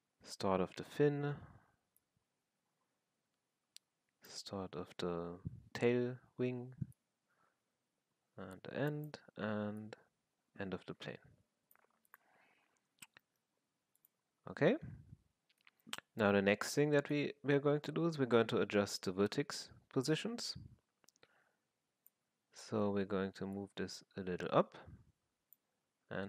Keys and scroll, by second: 25.8 r.